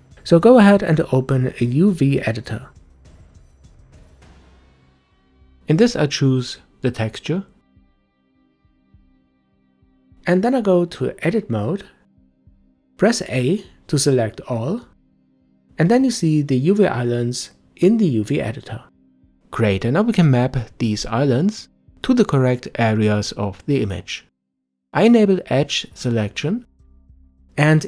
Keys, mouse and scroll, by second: 0.0 click, 6.0-8.2 drag, 8.2-10.3 scroll down 6, 10.3 Tab, 12.4 a, 15.9 a, 25.8-26.8 drag, 27.3 a.